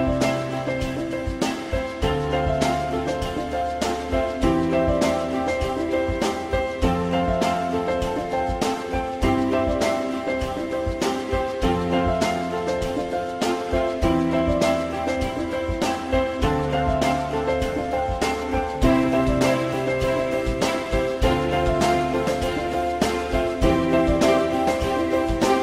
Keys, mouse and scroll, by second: 1.0 alt+middle click, 2.5 alt+middle click, 9.3 ctrl+click, 9.7 alt+middle click, 16.2 alt+middle click.